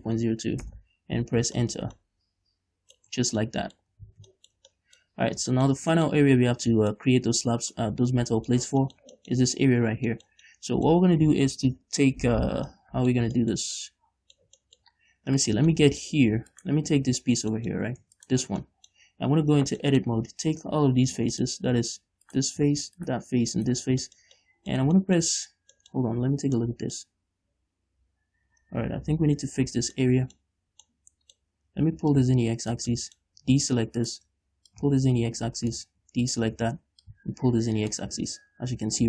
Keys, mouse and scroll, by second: 1.0 Return, 1.9-3.3 shift+middle drag, 3.4 Tab, 3.6 scroll down 2, 4.2 a, 5.0-15.2 middle drag, 5.4-5.9 scroll up 2, 10.2 scroll down 2, 15.3 scroll up 2, 15.8 right click, 16.1 middle click, 16.9 right click, 17.2 Tab, 17.7 middle click, 18.1 scroll up 2, 18.4 Tab, 18.5 right click, 18.7 Tab, 19.2-21.7 middle drag, 21.7 click, 22.6 right click, 23.4 shift+right click, 23.9 shift+right click, 24.2 scroll down 2, 24.4 shift+middle click, 25.3-32.5 shift+middle drag, 26.6-26.9 scroll up 2, 27.6-29.4 scroll up 2, 29.4 KP_Decimal, 30.8-31.2 scroll up 2, 32.5 click, 33.3-34.3 middle drag, 34.3 shift+right click, 35.0-36.6 drag, 36.6 shift+right click, 37.4-39.0 drag, 38.5 Tab.